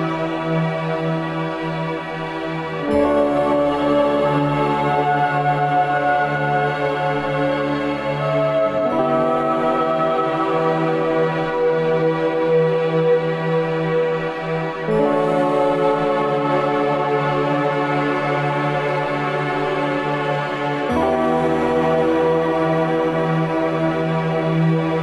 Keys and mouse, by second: 0.1 click, 5.7 click, 7.8 click, 10.8-11.4 middle drag, 11.8 click, 13.0 ctrl+s, 14.6-18.6 middle drag, 19.4-24.8 middle drag, 24.9 middle click.